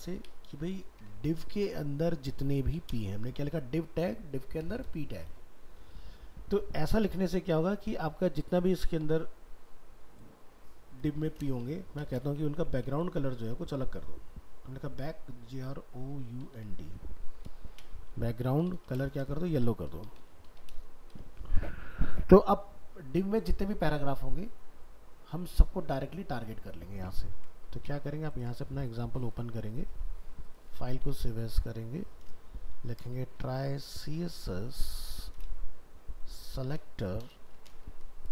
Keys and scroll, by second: 27.3 ctrl+s, 29.9 ctrl+Tab, 30.8 alt+f, 30.9 alt+秄.